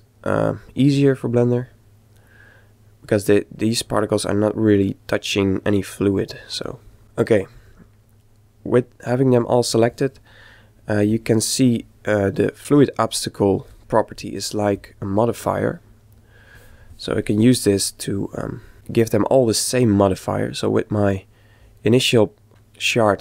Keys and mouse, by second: 0.9-4.3 middle drag, 6.3-8.2 middle drag, 11.8 click, 14.7 click, 18.0-19.8 middle drag, 20.6-22.4 middle drag.